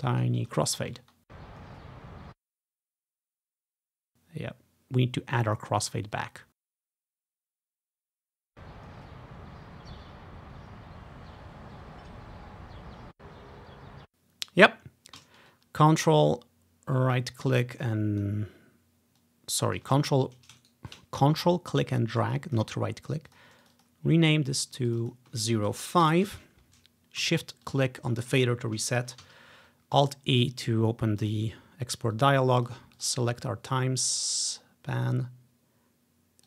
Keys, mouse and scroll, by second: 0.4-0.7 ctrl+scroll down 1, 0.7 ctrl+scroll up 1, 1.1 space, 2.2 space, 2.4-3.1 scroll down 1, 3.1-6.5 drag, 6.7 space, 9.1-9.4 ctrl+scroll down 1, 13.0 click, 13.7-14.5 ctrl+scroll down 1, 14.0 space, 16.3-20.7 ctrl+drag, 21.3 typing, 21.6-23.5 ctrl+drag, 23.7 click, 24.4-26.5 drag, 26.0-27.2 typing, 26.3 Return, 27.8-29.2 shift+drag, 29.1-29.9 typing, 31.1-31.8 typing, 31.3-34.3 drag.